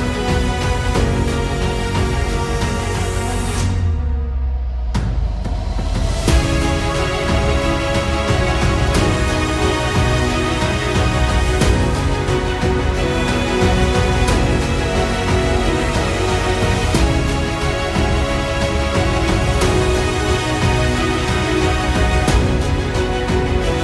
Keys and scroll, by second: 0.0-0.9 typing, 4.8 space, 7.4 space, 10.6 space, 12.4 g, 15.4 space, 19.3 space, 22.2 space.